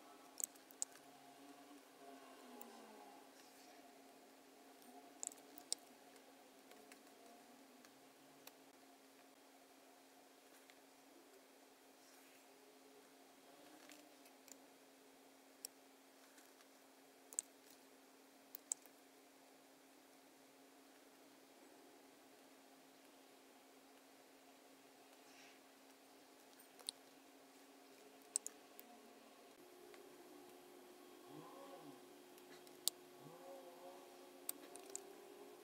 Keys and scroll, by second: 0.7 super+9, 0.8 super+F9, 5.5 super+F9, 6.7 space, 18.5 super+9, 18.5 super+F9, 28.2 super+F9, 32.9 space, 34.8 super+=.